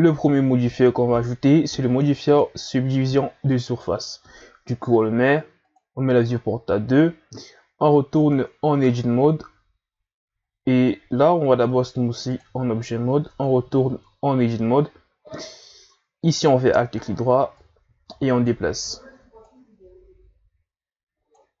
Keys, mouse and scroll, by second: 0.2-0.6 scroll up 2, 2.2-5.2 drag, 5.7-6.7 drag, 6.7-7.3 scroll up 1, 8.2 Tab, 8.8 shift+scroll up 8, 10.4 scroll up 1, 10.7 Tab, 11.7 w, 13.3 Tab, 14.8-15.3 scroll up 4, 16.3 alt+right click, 17.6 click, 18.7 ctrl+z, 19.4-21.6 drag.